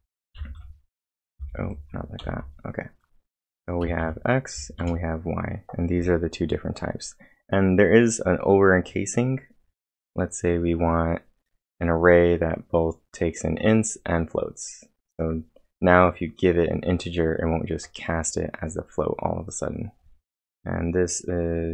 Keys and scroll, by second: 0.1-1.0 typing, 2.2 ctrl+l, 3.8 x, 4.0 Return, 4.5 y, 4.8 Return.